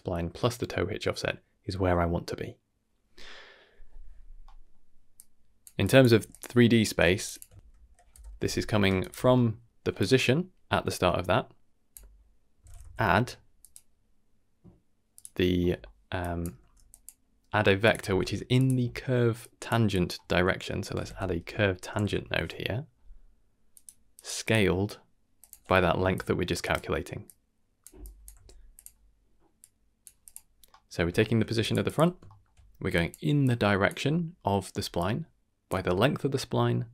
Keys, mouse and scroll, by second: 4.4 middle drag, 5.1-5.7 drag, 5.8 drag, 6.1 g, 7.0 g, 7.3 click, 8.3 ctrl+BackSpace, 9.3 middle click, 9.9-13.7 drag, 12.8 d, 15.1 click, 15.6 middle click, 15.9 scroll down 1, 16.2 drag, 16.5 g, 17.8 click, 18.0 shift+d, 19.4 click, 19.9-23.7 drag, 24.1 click, 24.4-25.4 drag, 26.1-26.6 drag, 27.2-27.8 drag, 28.0-28.3 drag, 28.3 g, 29.6-30.0 drag, 30.2 click, 30.5 scroll down 1, 30.7 middle click, 31.1 shift+middle click, 31.5 d, 31.6 click, 31.8 click, 32.2 shift+middle click, 32.8-36.9 typing, 32.9 click, 33.4-33.9 drag, 35.0-35.6 drag.